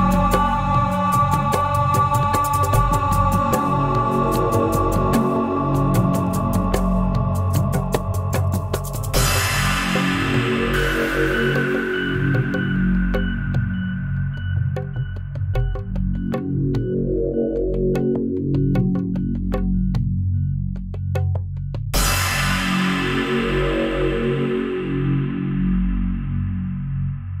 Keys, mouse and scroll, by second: 0.3 click, 0.6 middle click, 0.8 click, 1.0 middle click, 1.2 middle click, 1.5 click, 2.2 middle click, 3.5 click, 6.6 click, 11.4-12.9 drag, 16.6 click, 18.1 click, 19.1 click, 20.3 click, 22.6 shift+click, 23.7 click, 24.7 click, 27.0 click.